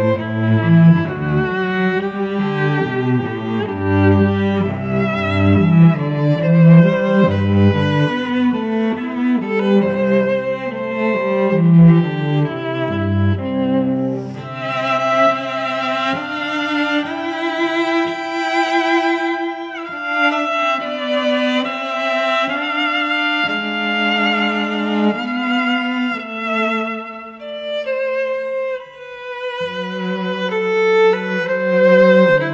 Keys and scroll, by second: 1.2 Tab, 3.8 space, 5.2 ctrl+t, 7.1 Return, 9.7 v, 11.0 ctrl+shift+[, 19.8 ctrl+t, 21.9 Return, 22.2 v, 23.6 ctrl+t, 26.0 Return, 28.3 ctrl+t, 30.4 Return.